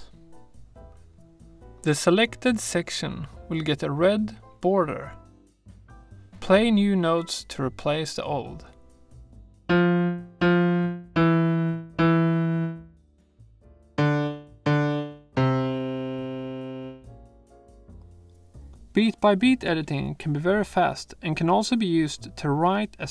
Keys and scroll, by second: 9.8 r, 11.0 e, 14.0 w, 15.3 q.